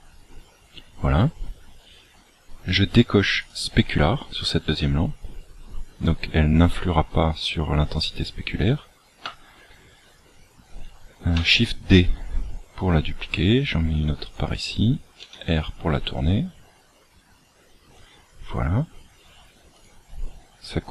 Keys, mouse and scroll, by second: 1.8-3.3 scroll down 2, 3.3 click, 3.3-4.2 scroll down 1, 12.0 shift+d, 15.2 r, 19.7 click.